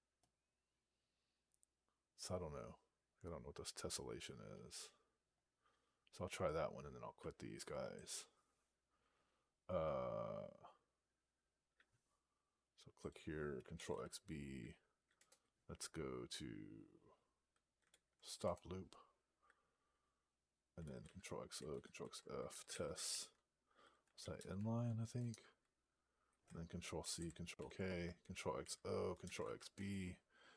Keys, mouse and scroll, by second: 7.8 click, 12.9 click, 15.0 Return, 17.7 alt+p, 18.3 Return, 21.9 ctrl+f, 22.0-24.7 typing, 25.2 Return, 27.4 ctrl+k, 29.6 Return.